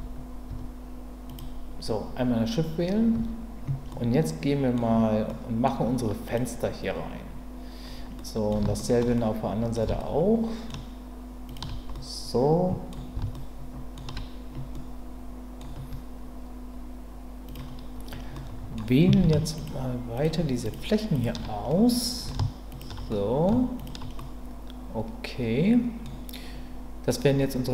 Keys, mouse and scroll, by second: 0.5 Tab, 1.2 click, 3.1 Tab, 3.9 middle click, 5.3 middle click, 6.2 click, 8.2 middle click, 8.8 ctrl+middle click, 9.1 middle click, 10.0 shift+middle click, 11.4 shift+click, 12.0 middle click, 13.3 shift+middle click, 14.7 middle click, 18.3 middle click, 19.5 shift+click, 20.7 shift+click, 21.1 shift+click, 21.7 middle click, 22.7 shift+click, 23.1 middle click, 23.7 shift+click, 24.2-26.0 middle drag.